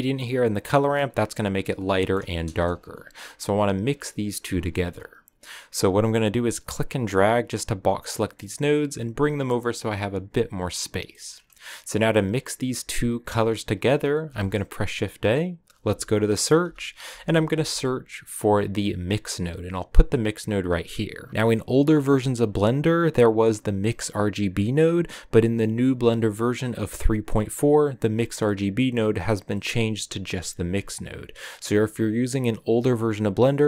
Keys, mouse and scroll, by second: 0.3 click, 0.6 middle click, 0.9-1.9 scroll up 3, 1.9 middle click, 2.5 KP_0, 6.6-7.9 drag, 11.8 click, 12.3 click, 12.8 click, 21.3 scroll up 2, 22.2-29.6 drag.